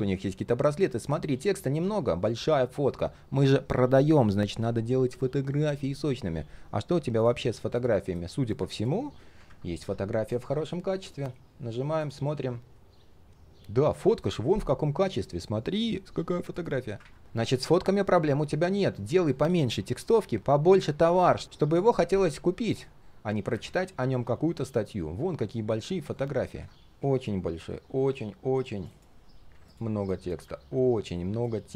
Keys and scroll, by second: 9.4 ctrl+\.